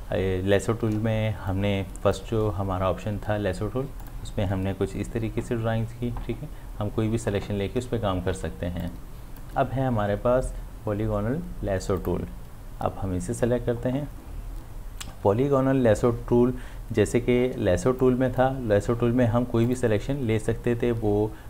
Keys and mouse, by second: 1.5-4.0 drag, 8.2 click, 8.3 ctrl+d, 8.8-11.6 drag, 12.0 click, 18.0-19.6 drag.